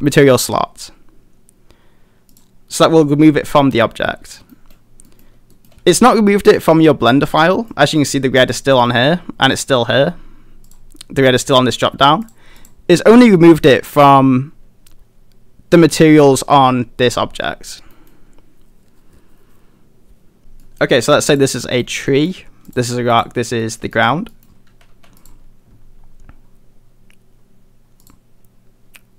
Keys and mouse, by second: 2.4 click, 3.1-4.4 middle drag, 4.5 shift+middle drag, 5.1 middle click, 5.6 shift+middle click, 7.6 middle click, 8.4 click, 8.9 middle click, 10.7 click, 18.0 middle drag, 20.6 middle click, 21.8 middle click, 22.1 shift+middle click, 22.7 click, 23.1 click, 23.6 middle click, 23.9 shift+middle click, 24.3 middle click, 24.7 a, 25.1 a.